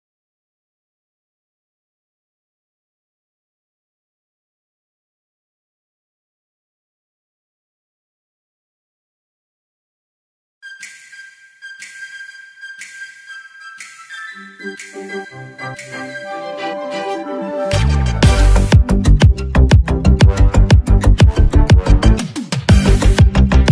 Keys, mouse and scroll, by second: 1.4-1.8 alt+scroll up 1, 2.2-2.5 scroll down 1, 2.9 alt+scroll down 1, 4.4 click, 9.7 click, 15.1-23.7 drag.